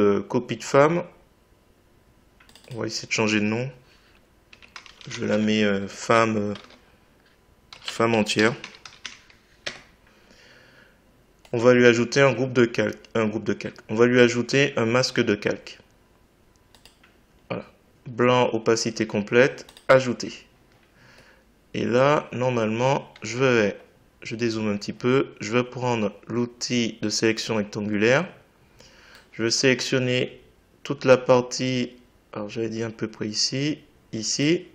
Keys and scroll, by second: 4.5 f, 5.3 space, 6.6 space, 7.7 e, 9.6 Return.